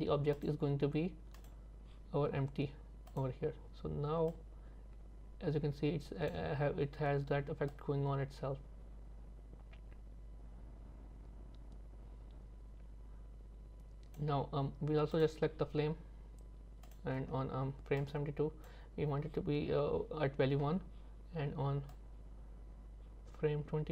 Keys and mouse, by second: 0.4-3.3 drag, 4.4-6.4 drag, 7.7-14.2 drag, 18.0 click, 22.0-23.9 drag.